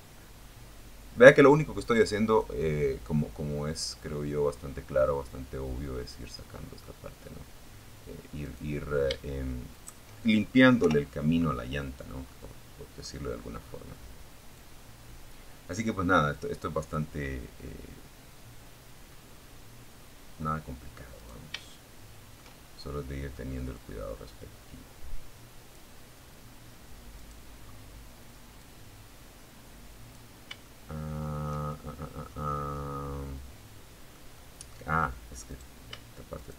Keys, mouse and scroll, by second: 0.9 scroll down 1, 1.3-5.2 middle drag, 6.6 right click, 7.9 shift+right click, 8.9 o, 9.7 middle click, 10.5 middle click, 11.4 scroll up 1, 12.7-15.3 drag, 15.4-17.5 middle drag, 17.5 scroll down 1, 19.3 right click, 19.8 shift+middle click, 21.9-24.1 drag, 24.4 scroll down 1, 25.3 right click, 25.8 scroll up 1, 26.8-28.5 drag, 28.8-29.8 shift+middle drag, 30.0 shift+middle click, 30.9-32.5 middle drag, 32.7 middle click, 33.7 right click, 34.5 shift+right click, 35.9 shift+right click.